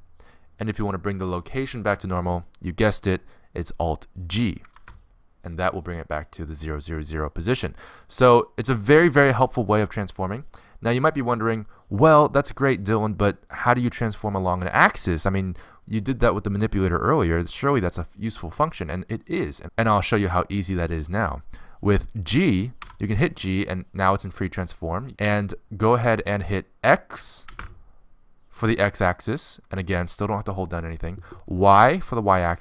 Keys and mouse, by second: 5.2 alt+g, 23.5 g.